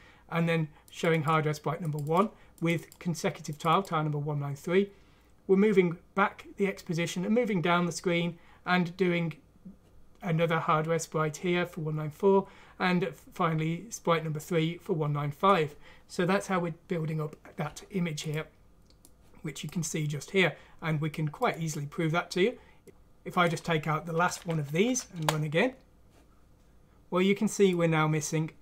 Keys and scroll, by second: 24.2 ;, 24.8 F6, 25.1 Return.